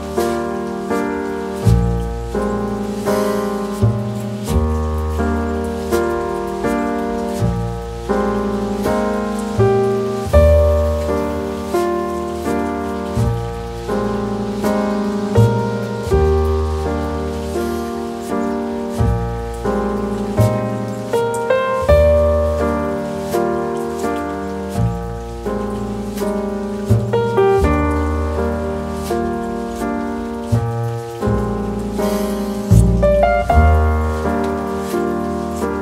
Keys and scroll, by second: 6.7-9.5 typing.